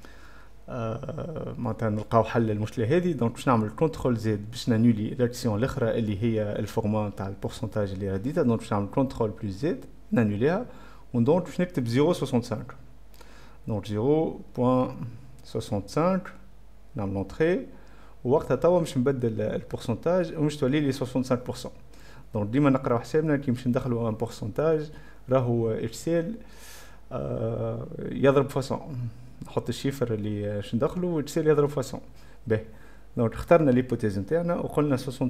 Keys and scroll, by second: 0.3-1.1 typing, 2.9 Caps_Lock, 2.9 a, 9.7 ctrl+z, 11.1-12.5 typing, 14.5-17.2 typing, 17.0 Return.